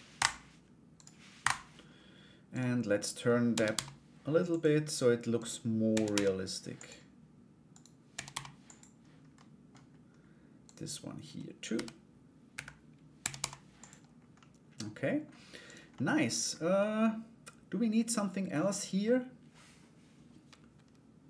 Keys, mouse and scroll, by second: 0.5 right click, 2.1 right click, 3.1 r, 5.0 right click, 5.5 r, 7.3 right click, 8.9 middle click, 10.2 right click, 12.7 r, 13.9 middle click, 15.2 right click, 15.5 middle click, 16.3-18.6 middle drag.